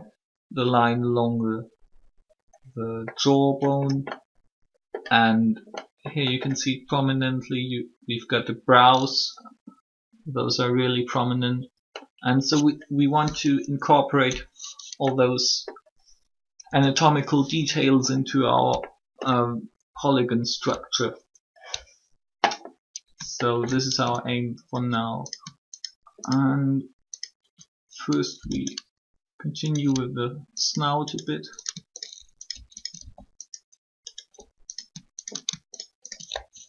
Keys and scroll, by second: 16.4 3, 28.3 shift+e.